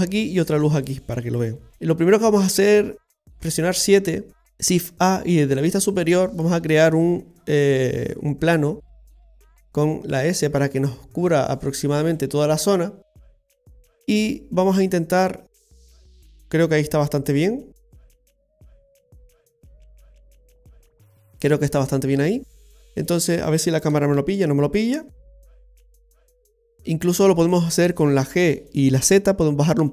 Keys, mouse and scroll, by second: 0.6 right click, 0.9 middle click, 1.7 scroll down 1, 3.3 KP_7, 4.4 click, 4.8 shift+a, 6.7 shift+a, 8.9 s, 15.0 middle click, 19.3 scroll up 1, 20.7 click, 21.1-22.3 scroll down 2, 21.4 middle click, 23.5 scroll up 1, 23.9 KP_0, 25.2 scroll up 1, 25.6-26.5 scroll down 3, 26.6 right click, 28.3 g.